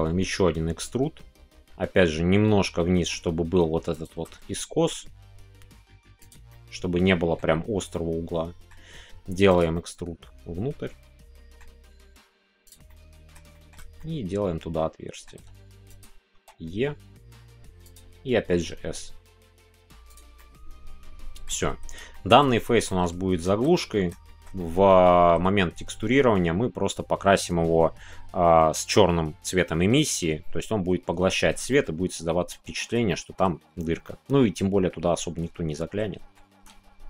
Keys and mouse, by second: 3.9 shift+click, 6.5 middle click, 7.9 middle click, 9.8-11.6 middle drag, 11.9 s, 12.8 middle click, 13.5 shift+middle click, 13.9-16.0 middle drag, 16.0 click, 17.8 click, 20.0 click, 20.3-21.4 middle drag, 22.1 shift+middle click, 22.8 middle click, 23.4 shift+middle click, 23.7 middle click, 24.2-25.5 shift+middle drag, 31.7-32.7 middle drag, 33.0 shift+middle click, 34.1-36.3 middle drag, 36.6 Tab.